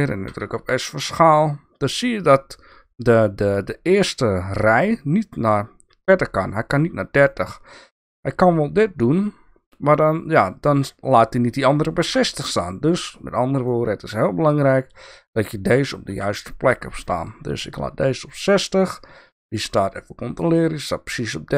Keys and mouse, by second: 0.3 s, 12.6-13.7 drag, 16.1 s, 19.6 click.